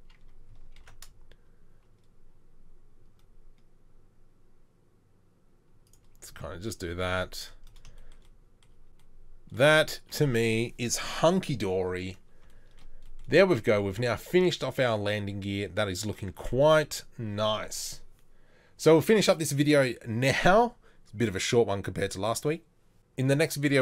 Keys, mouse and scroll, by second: 0.8 ctrl+b, 6.3 z, 7.1 Tab.